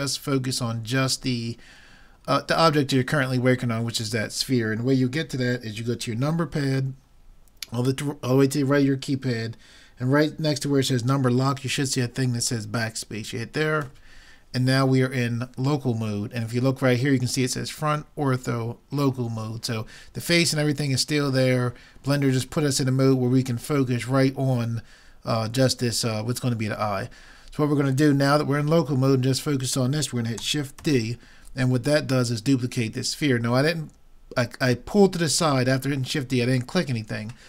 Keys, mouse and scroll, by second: 13.8 KP_Divide, 25.0-30.8 middle drag, 30.8 shift+d.